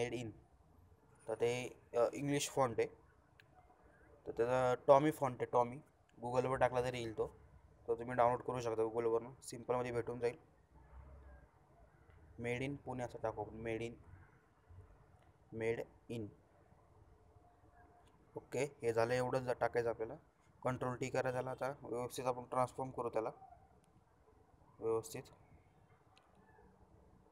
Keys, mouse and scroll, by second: 3.9 shift+click, 7.6 shift+click, 13.8-16.3 typing, 18.9 shift+click, 20.1 ctrl+shift+t, 21.5-22.7 shift+drag, 27.0-27.3 shift+drag.